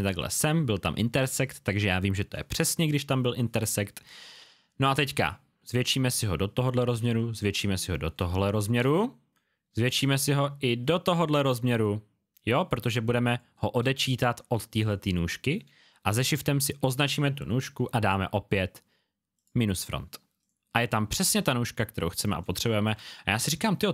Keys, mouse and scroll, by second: 4.9 click, 7.8-8.3 alt+scroll down 2, 8.3 click, 9.0-10.0 alt+scroll up 1, 10.0 scroll up 1, 13.2 space, 13.4 click, 14.1-15.6 alt+scroll down 1, 16.1 shift+scroll down 1, 16.8 shift+click, 19.3 click, 21.6 alt+scroll down 1, 22.3 scroll down 1, 22.4 click.